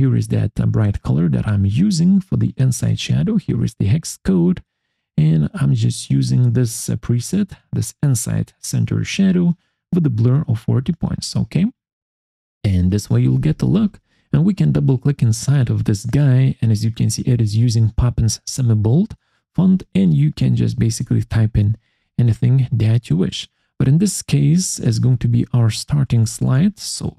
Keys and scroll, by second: 20.7-22.7 typing, 23.5 ctrl+a, 24.3-25.9 typing, 26.9 Caps_Lock, 26.9-27.1 typing.